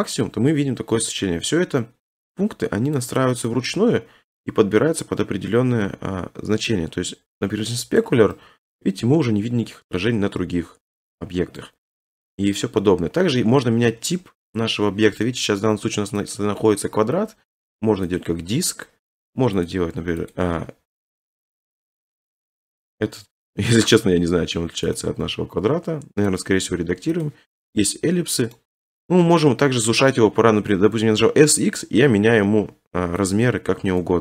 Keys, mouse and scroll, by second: 0.5-0.8 scroll, 3.0 click, 5.0 click, 8.0-8.7 drag, 10.0 middle click, 11.6 click, 13.3 scroll, 16.3 click, 18.2 click, 19.7 click, 20.3 click, 22.6 middle click, 23.9 click, 25.0 click, 26.4 click, 27.3 click, 28.5 middle click, 29.0 s, 29.2 x, 33.3 click, 33.9 ctrl+z.